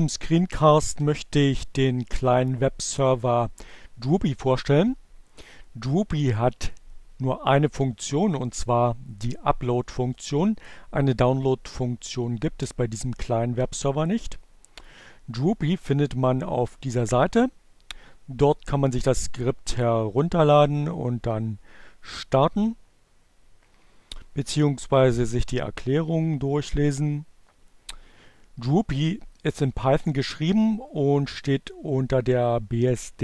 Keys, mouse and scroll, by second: 14.9 click.